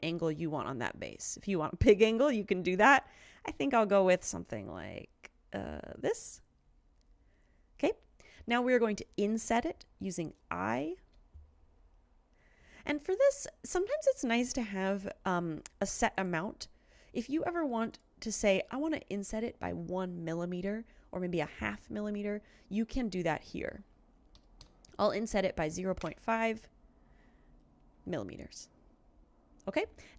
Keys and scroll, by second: 11.1 i, 24.4-26.6 typing.